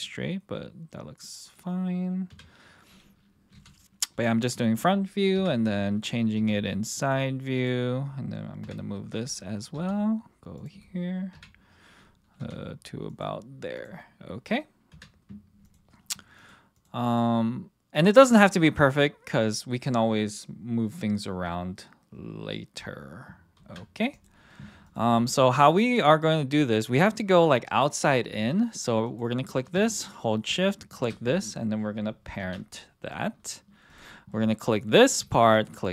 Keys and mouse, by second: 0.0-1.2 middle drag, 1.4 click, 2.3 KP_1, 3.5 g, 4.5 click, 5.4 KP_3, 6.3 g, 7.0 click, 7.5 click, 8.6 KP_1, 9.7 g, 11.3 KP_3, 12.4 g, 13.1 click, 13.7 click, 14.9 KP_1, 17.0 click, 18.5 click, 23.6 ctrl+., 24.9 click, 29.0 click, 32.4 ctrl+p, 33.9 click, 35.5 shift+click.